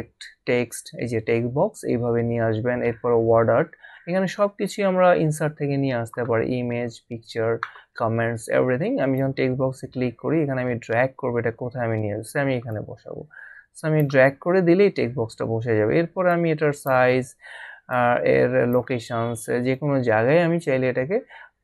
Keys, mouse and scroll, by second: 9.0 click, 12.7 click, 16.3 click.